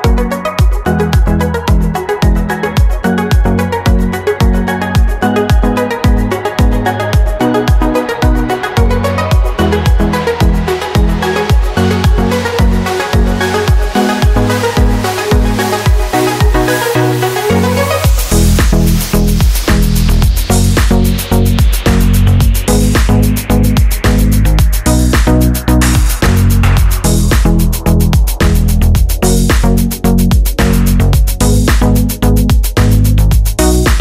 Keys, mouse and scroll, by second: 2.4 click, 3.2 click, 5.2 click, 8.8 click, 9.9 click, 10.7 KP_Subtract, 11.7 click, 12.6 click, 13.1 click, 14.2 click, 15.5 click, 17.3 click, 18.9 click, 20.0 click, 20.7 click, 22.4-23.8 drag, 24.6-28.4 drag, 29.5 click, 30.3 click, 31.8 click, 32.6 click, 33.5 click.